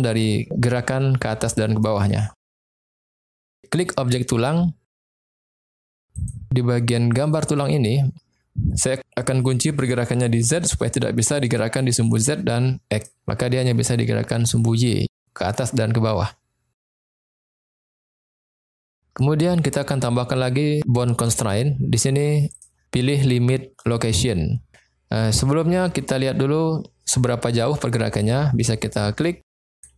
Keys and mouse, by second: 1.6 click, 2.4 middle click, 6.2 click, 7.2 click, 10.6 click, 12.9 click, 16.9 middle click, 18.2 middle click, 21.4 click, 22.5-24.1 drag, 29.8 click.